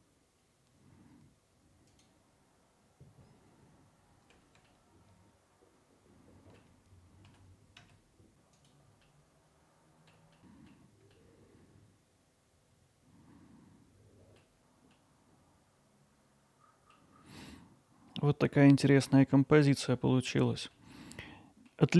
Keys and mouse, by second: 0.1-0.7 alt+middle drag, 1.6-2.8 alt+middle drag, 4.2 click, 4.5 alt+middle click, 5.8 alt+middle click, 6.2 click, 9.1-10.1 alt+middle drag, 10.5 alt+middle click, 11.1 ctrl+alt+middle click, 14.9-16.9 alt+middle drag, 17.5-19.4 alt+middle drag, 19.6 middle drag, 20.3 middle click, 20.7 alt+middle drag, 21.2-21.7 middle drag.